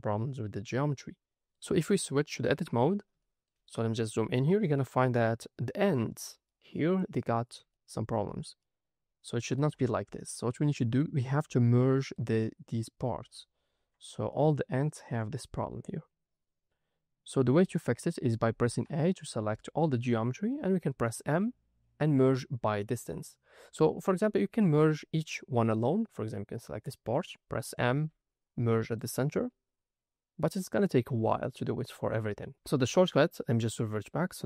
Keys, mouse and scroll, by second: 2.5 Tab, 3.1 shift+middle click, 3.7-4.5 scroll up 3, 4.5 middle click, 5.2 ctrl+middle click, 6.2 click, 7.7 ctrl+middle click, 10.2-10.5 scroll down 1, 11.5 ctrl+middle click, 12.9 scroll down 3, 13.7-14.0 scroll up 2, 14.3 ctrl+middle click, 15.3 click, 16.1 scroll down 2, 16.8-17.3 scroll up 2, 17.3-17.9 scroll down 3, 17.9 middle click, 18.5 a, 18.9 shift+middle click, 19.5 ctrl+middle click, 21.2 m, 24.6 ctrl+middle click, 26.1 click, 27.8 m, 31.2-31.6 scroll down 2, 32.6 ctrl+z, 34.0-34.4 scroll up 3.